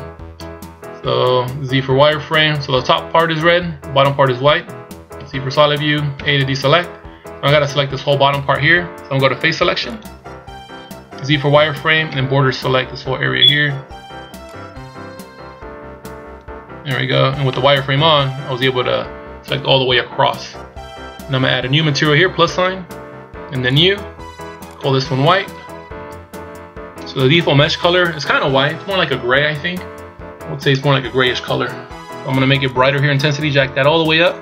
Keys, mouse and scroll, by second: 1.7 z, 5.2 z, 6.2 a, 9.9 click, 11.2 z, 12.0 b, 17.5 middle click, 19.4 KP_1, 22.4 click, 23.6 click, 24.6 click, 33.1 click.